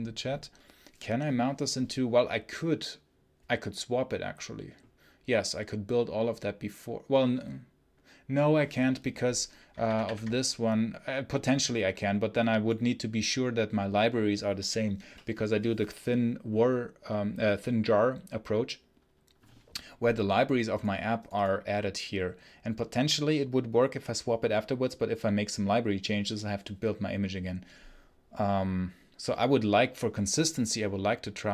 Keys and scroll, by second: 9.7 alt+1.